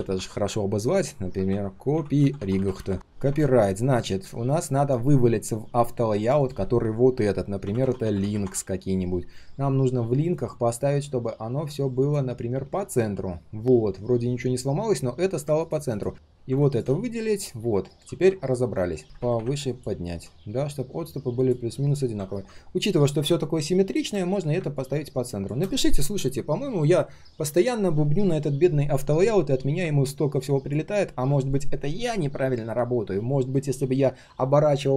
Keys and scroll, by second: 17.0 alt+h, 21.7 ctrl+shift+4.